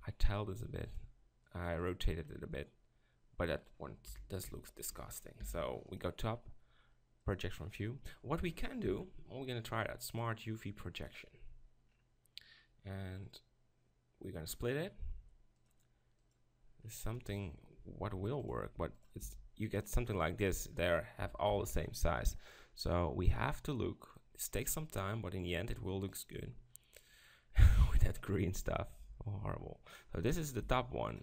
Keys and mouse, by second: 4.1 KP_7, 4.4 Tab, 5.4 u, 8.0 click, 8.8 u, 13.3-16.3 drag, 16.5-17.8 drag, 17.8 s, 18.6 g, 19.2 s, 21.5 ctrl+l, 25.4 click, 29.0 g, 30.6 s.